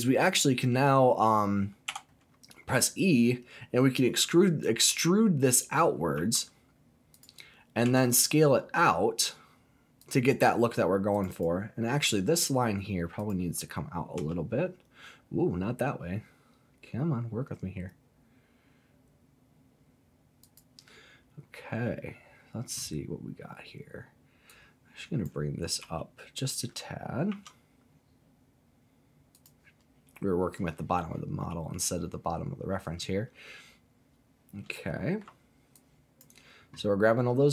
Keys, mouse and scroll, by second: 0.2 click, 1.9 e, 6.1 z, 7.1 click, 7.8 s, 10.0 click, 11.1 click, 11.3 click, 12.4 alt+click, 13.2 alt+click, 14.1 s, 20.4 click, 21.4 scroll up 1, 21.9-23.2 scroll up 1, 23.2-23.5 scroll up 1, 24.5 click, 25.8 g, 27.3 z, 29.3 click, 34.7 shift+middle click, 35.7 click.